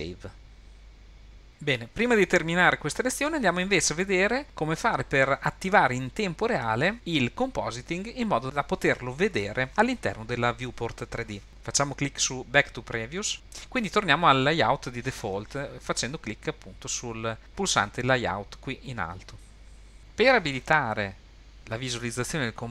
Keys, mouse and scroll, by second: 19.7 click.